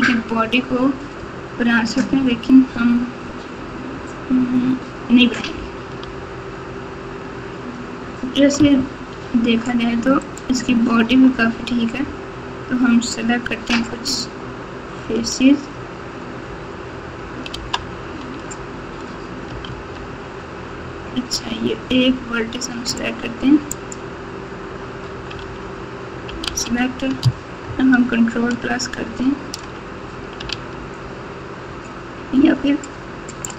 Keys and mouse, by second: 6.0 Tab, 8.5 ctrl+Tab, 11.0 Tab, 17.5 alt+z, 19.6 alt+z, 22.9 click, 23.7 click, 25.4 alt+z, 26.4 alt+z, 27.6-28.6 ctrl+KP_Add, 30.5 alt+z.